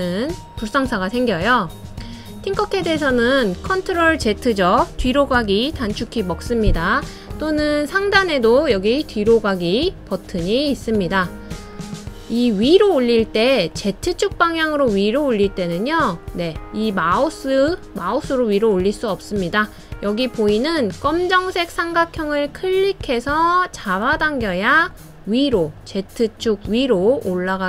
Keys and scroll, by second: 6.2 super+z.